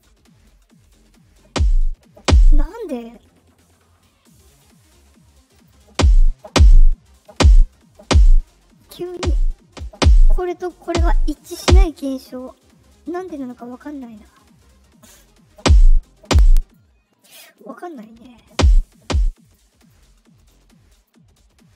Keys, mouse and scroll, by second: 4.4 click, 5.5 click, 13.4 click, 15.0 click, 16.5 click, 17.4 click, 17.8 click, 19.4 click, 19.7 click, 20.3 click, 20.9 click.